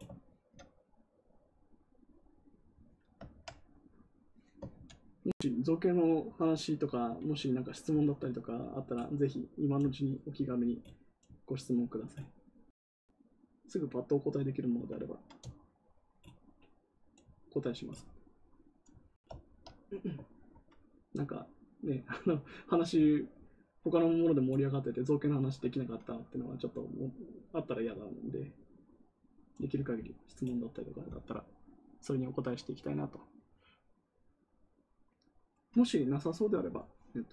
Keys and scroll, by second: 4.7 ctrl+z.